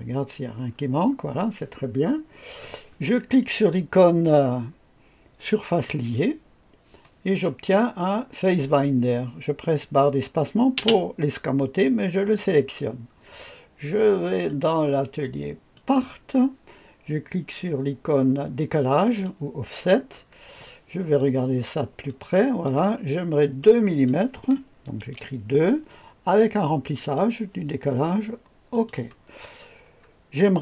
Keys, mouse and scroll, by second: 0.6 scroll down 2, 5.8 click, 7.8-10.7 scroll down 1, 10.7 space, 12.3 click, 14.4 click, 15.7 click, 19.0 click, 20.1-21.2 scroll up 2, 20.6-21.2 right drag, 21.5-22.0 scroll up 2, 22.0-22.7 drag, 23.6 click, 25.0 KP_2, 26.9 click, 28.7 click, 29.2-30.6 scroll down 1.